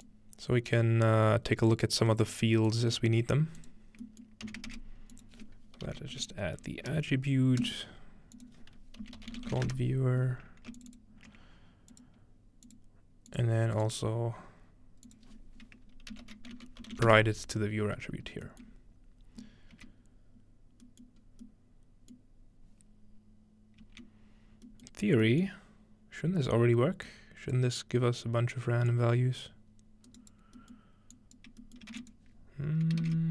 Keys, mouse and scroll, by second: 0.1 click, 4.5 typing, 5.2 click, 5.9-7.4 typing, 7.6 click, 8.4 click, 9.0-10.1 typing, 10.8 ctrl+shift+click, 12.0 ctrl+shift+click, 12.7 ctrl+shift+click, 13.3 click, 14.2-14.5 scroll down 2, 14.5 scroll up 2, 15.1 click, 16.0-17.6 typing, 19.9 middle click, 19.9 z, 21.1 middle click, 21.2-22.2 scroll up 2, 22.2-24.0 middle drag, 22.2-23.3 scroll up 1, 24.0 z, 25.9-27.1 middle drag, 25.9-26.4 scroll down 2, 26.4-27.1 scroll down 1, 27.1-33.3 drag, 31.9 shift+a, 33.0 shift+a.